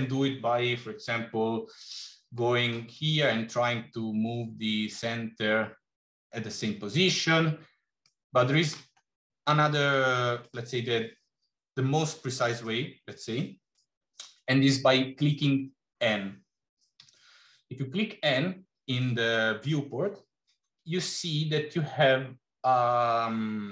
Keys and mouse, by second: 1.6 click, 7.9-8.8 middle drag, 9.8 middle click, 16.9 n.